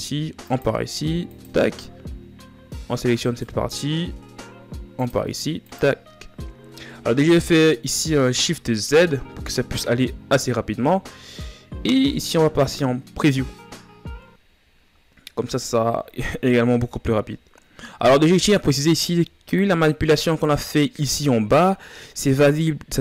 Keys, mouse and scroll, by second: 1.2-2.9 drag, 2.9-4.0 right drag, 6.0-8.6 drag, 8.6 shift+z, 12.4 click, 13.9 scroll down 1, 16.0-16.5 shift+scroll down 4, 16.5-17.5 scroll up 4, 17.5-17.8 scroll down 3.